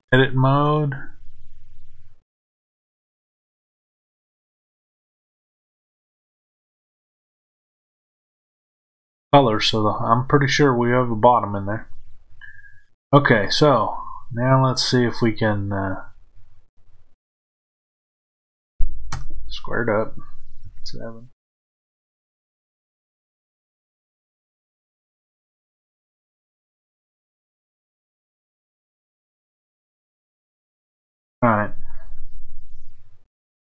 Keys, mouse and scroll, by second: 2.7-33.6 middle drag, 19.0 KP_1, 20.5 KP_7.